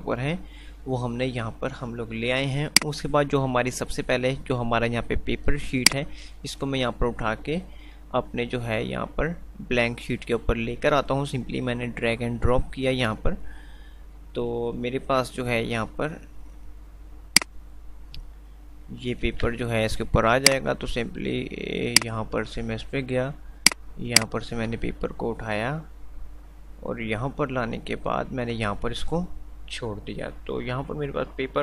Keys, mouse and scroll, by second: 2.8 click, 6.2-10.8 drag, 17.8-18.3 click, 19.6 a, 20.6-31.5 drag, 24.6 click, 25.1-28.9 drag.